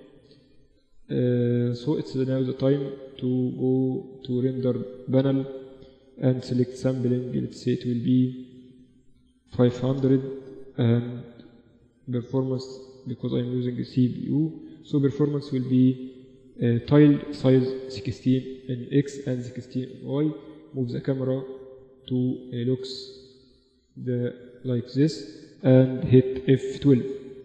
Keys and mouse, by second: 2.3-3.9 drag, 3.9-5.9 middle drag, 5.9-9.2 drag, 9.4 0, 11.8-16.0 drag, 16.1-19.9 drag, 22.4-23.8 middle drag.